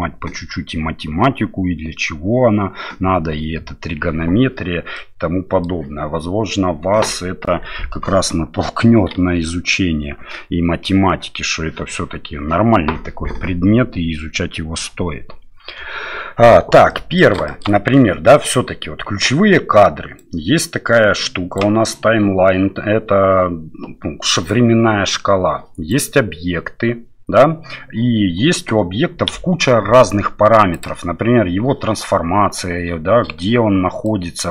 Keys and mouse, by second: 5.0 middle click, 15.7 KP_7, 16.9 middle click, 17.4 middle click, 20.1-34.5 drag.